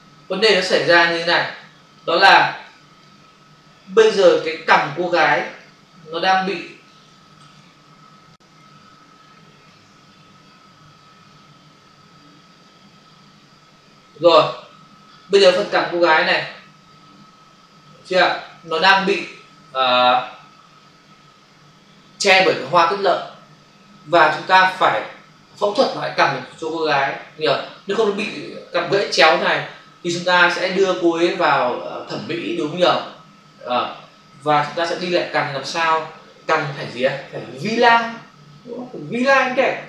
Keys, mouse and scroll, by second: 1.7 ctrl+space, 7.5 space, 12.6 click, 16.9 ctrl+click, 19.2 ctrl+-.